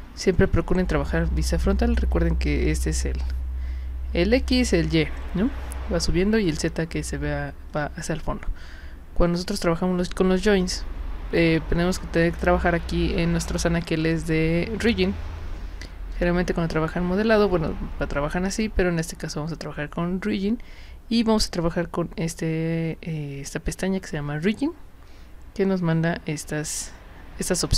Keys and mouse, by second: 14.0 click, 16.1 click, 18.5 click, 19.2 click.